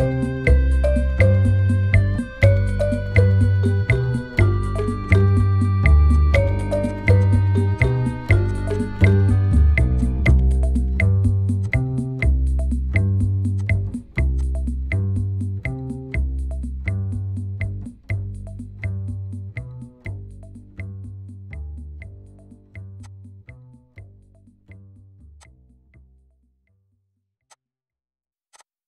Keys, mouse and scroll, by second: 0.7 typing, 2.1 Return, 2.7 typing, 3.8 Return, 4.2 typing, 5.5 typing, 9.5 ctrl+t, 9.9 alt+click, 12.3-14.1 scroll up 6, 19.0 alt+scroll up 1, 19.7 alt+scroll up 1, 20.3 alt+scroll down 4, 20.9 scroll up 1, 21.5 alt+scroll down 1, 21.8 alt+scroll, 22.4 right click, 27.7 alt+scroll up 1, 28.5 double click.